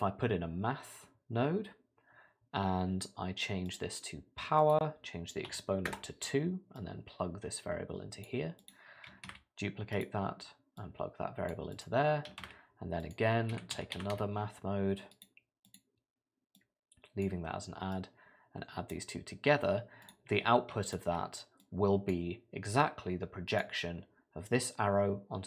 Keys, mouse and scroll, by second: 4.6 click, 6.8 click, 9.1 click, 9.3 shift+d, 10.8 click, 11.7 click, 12.4 shift+a, 16.6 click, 17.9 click, 20.0 click, 20.8 shift+click, 21.6 click, 23.5 click.